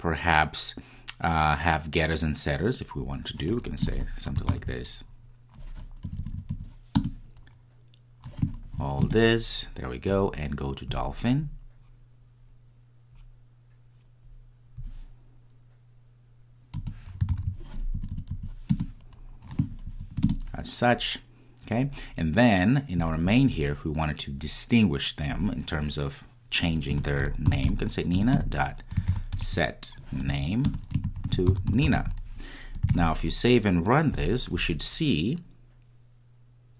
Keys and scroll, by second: 4.6 super+n, 17.4 super+n, 28.3 Return, 32.8 Return, 34.1 super+s, 34.1 ctrl+r.